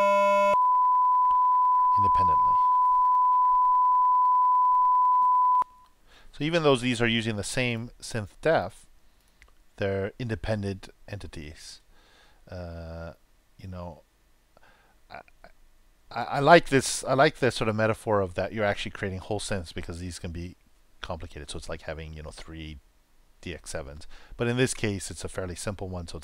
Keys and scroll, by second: 0.4 super+Return, 2.6 super+c, 3.2 super+v, 5.2 super+3, 5.5 super+Return.